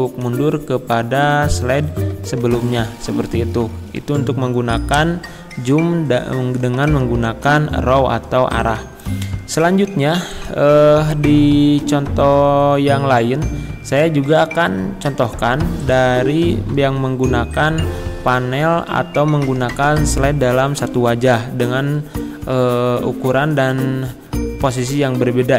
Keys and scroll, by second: 8.8 Escape, 21.1 shift+F5.